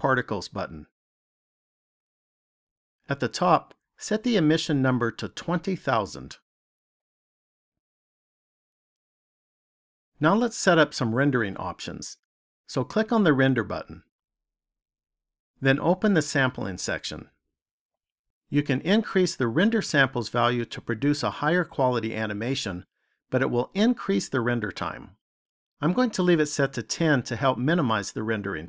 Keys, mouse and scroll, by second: 7.8 KP_0.